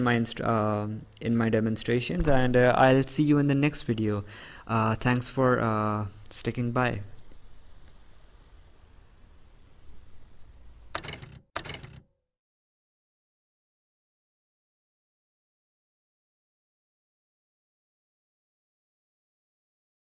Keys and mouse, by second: 1.1 click.